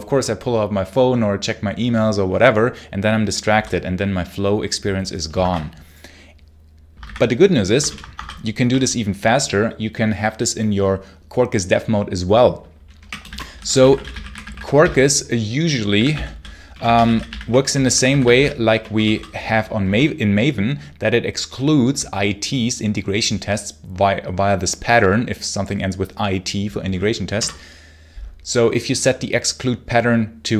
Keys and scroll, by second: 5.2 shift+Escape, 6.9 ctrl+c, 7.7 ctrl+l, 8.0 Escape, 8.1 k, 8.5 a, 12.6-19.7 typing, 27.2 Return.